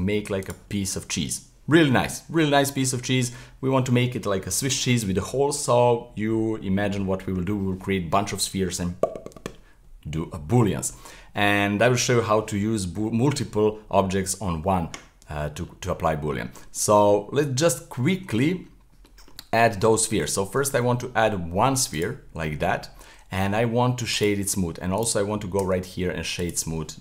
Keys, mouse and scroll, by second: 0.7-3.4 middle drag, 3.4-4.7 scroll up 2, 10.6-14.3 middle drag, 15.3-17.3 middle drag, 17.3-18.1 scroll up 1, 18.1-19.2 shift+middle drag, 19.2-20.0 scroll down 1, 20.0 scroll down 3, 22.0 shift+a, 22.4-23.4 middle drag, 23.4 w, 24.9 right click, 25.6 w.